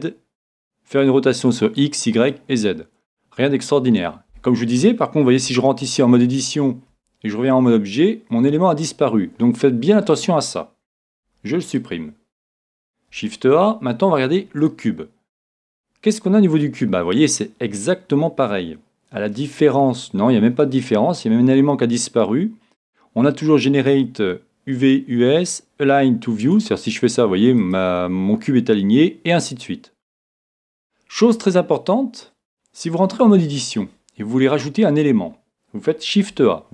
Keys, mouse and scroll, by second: 5.5 Tab, 6.9 Tab, 11.2 x, 13.1 shift+a, 26.4-29.5 drag, 33.2 Tab, 36.3 shift+a.